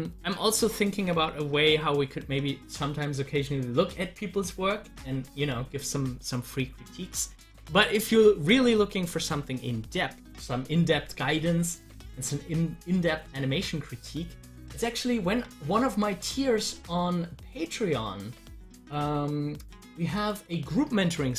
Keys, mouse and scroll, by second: 8.9 click, 9.1 double click, 14.9 click, 20.1 click.